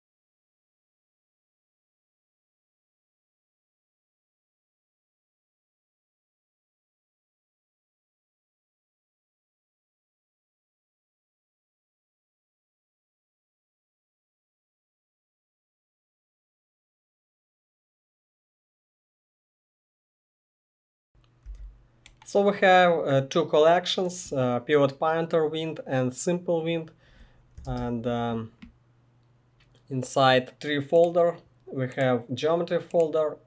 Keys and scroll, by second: 0.0-16.4 typing, 18.2-21.6 typing, 27.6 ctrl+space.